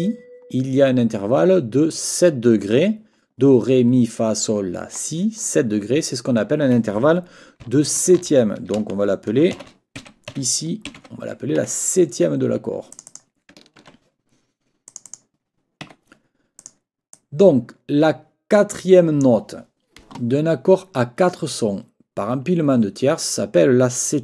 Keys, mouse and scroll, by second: 8.0 ctrl+t, 10.0-11.5 typing, 11.6 Escape, 12.9 click, 13.8 ctrl+a, 14.9 click, 15.8 Escape, 16.6 click, 17.1-19.4 drag.